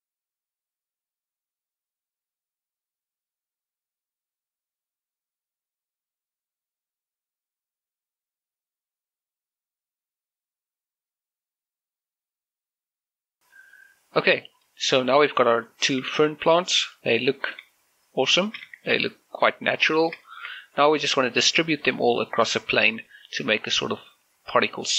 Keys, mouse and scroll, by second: 0.0 click, 0.1 middle click, 0.2 g, 0.5 right click, 0.5 middle click, 0.8 scroll up 1, 1.1 Tab, 1.1 shift+middle click, 1.1 right click, 1.3 scroll up 1, 1.3-2.8 typing, 1.8 middle click, 1.9 scroll up 1, 2.1 right click, 2.4 middle click, 2.8 right click, 3.4 right click, 3.5 scroll down 1, 4.0 click, 4.6 scroll down 1, 4.8 middle click, 5.0-12.3 typing, 5.2 click, 5.4 click, 5.8 click, 6.0 click, 6.4 scroll up 1, 6.4 right click, 6.6 Tab, 7.1 click, 7.4 middle click, 7.8 right click, 8.1 click, 8.3 right click, 8.5 middle click, 8.8 Tab, 8.9 shift+middle click, 8.9 right click, 9.4 click, 9.6 click, 9.6 middle click, 9.8 right click, 10.3 click, 10.5 middle click, 10.5 scroll, 10.6 Tab, 10.8 right click, 11.4 click, 11.5 right click, 11.6 click, 11.8 shift+middle click, 11.8 scroll up 1, 12.1 click, 12.3 click, 12.4 scroll down 1, 12.6 shift+middle click, 12.8 shift+middle click, 13.3 scroll up 1, 14.0 shift+middle click, 14.2 scroll up 1, 15.0 middle click, 15.4 scroll down 1, 15.6 shift+middle click, 16.0 scroll up 1, 16.4 middle click, 16.9 shift+z, 17.5 middle click, 18.0 scroll up 1, 19.2 shift+click, 19.6 shift+middle click, 19.7 middle click.